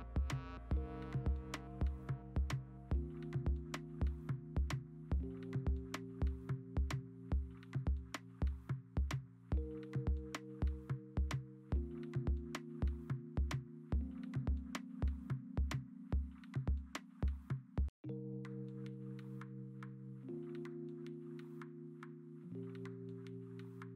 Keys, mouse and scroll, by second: 0.2 3, 0.6 ctrl+z, 2.5-5.0 typing, 3.9 ctrl+z, 4.3 ctrl+z, 7.5 Return, 8.0 v, 8.9 ctrl+s, 9.1-10.3 typing, 12.0 ctrl+z, 12.7 ctrl+z, 13.9 ctrl+z, 14.9 ctrl+z, 17.3 scroll, 18.0 1, 19.2 ctrl+alt+z, 21.1 3, 21.7 ctrl+z, 21.9 1, 22.4 e.